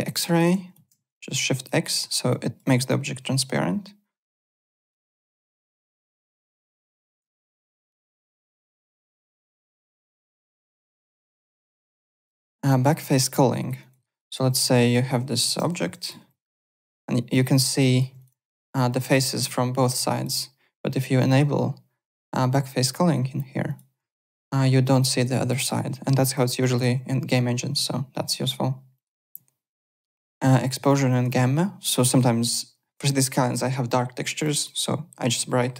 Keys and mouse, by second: 0.7 shift+x, 1.1 alt+click, 1.8 alt+middle click, 2.2 alt+click, 2.6 alt+right click, 2.8 alt+click, 4.9 shift+x, 5.6 click, 6.5 shift+z, 7.3 shift+x, 8.0 click, 9.0 shift+x, 10.3 alt+Tab, 12.4 click, 13.1 click, 13.5 alt+right click, 14.1 click, 14.9 alt+middle click, 15.1-16.6 typing, 16.0 click, 16.8 click, 17.1 alt+right click, 17.5 click, 17.8 alt+click, 18.4 alt+click, 19.1 alt+click, 21.1 click, 23.6 click, 24.1 alt+click, 25.2 alt+click, 26.6 alt+click, 28.2 click, 28.9 click, 29.2 alt+Tab, 29.8 alt+click, 31.1 alt+click, 31.3 alt+right click, 34.3 click, 35.4 click.